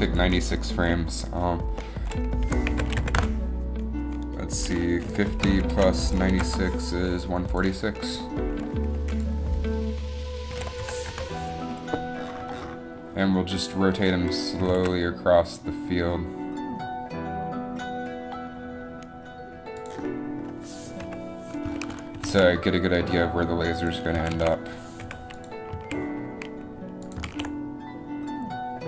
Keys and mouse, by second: 14.7 r, 20.2 middle click, 21.1 KP_7, 21.4 KP_7, 22.3 r, 22.3 r, 24.3 a, 24.5 a, 25.1 i, 25.9 a, 27.4 alt+a.